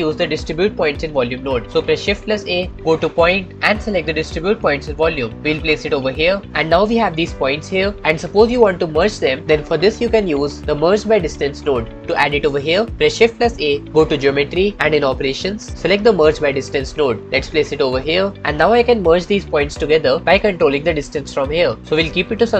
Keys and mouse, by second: 2.6 shift+a, 7.0-8.0 middle drag, 8.3-9.4 middle drag, 13.7 shift+a.